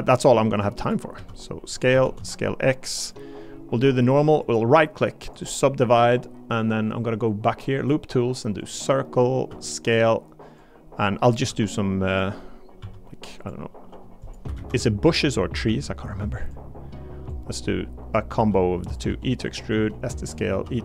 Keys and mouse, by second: 0.8 click, 1.1 s, 1.7 click, 2.2 x, 4.4-5.4 drag, 8.6 click, 9.5 s, 11.5 e, 12.1 click, 12.8 s, 13.7 e, 14.6 ctrl+z, 15.6 s, 16.4 click, 18.3-20.8 typing, 18.8 click, 19.4 click.